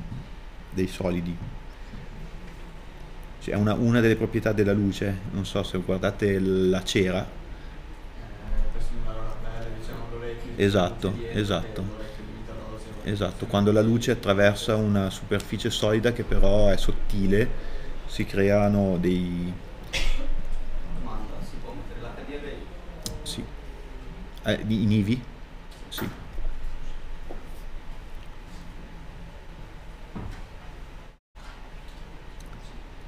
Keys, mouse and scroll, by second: 2.3 middle click, 31.5 middle click.